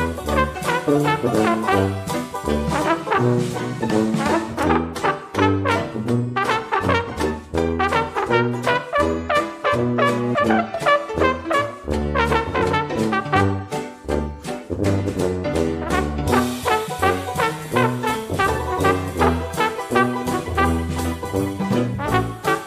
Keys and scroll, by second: 9.6-10.9 typing.